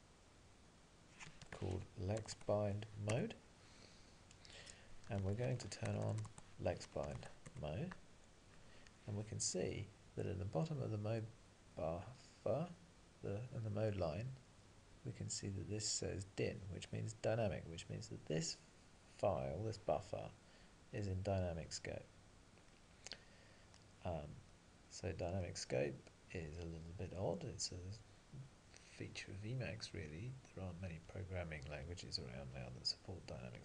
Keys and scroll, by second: 0.7 Return, 2.4 Tab, 3.7 Return, 5.3 alt+x, 6.3 Tab, 7.5 Return.